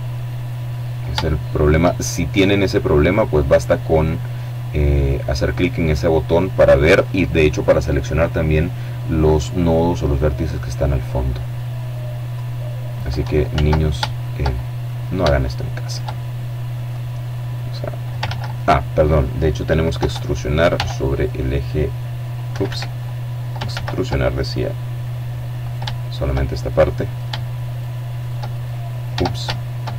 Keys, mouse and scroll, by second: 0.0-1.0 shift+drag, 3.8 click, 8.2 click, 9.4-10.8 middle drag, 11.1-12.2 drag, 12.3 ctrl+z, 13.0 shift+right click, 13.3 shift+click, 14.6 shift+right click, 15.0 shift+click, 16.3-17.4 drag, 17.0 ctrl+z, 18.7 e, 19.5 s, 21.2 Escape, 22.5 ctrl+z, 24.4 shift+right click, 25.2 shift+middle click, 26.5 shift+right click, 27.2 shift+click, 27.8 shift+right click, 28.2-29.7 shift+right drag.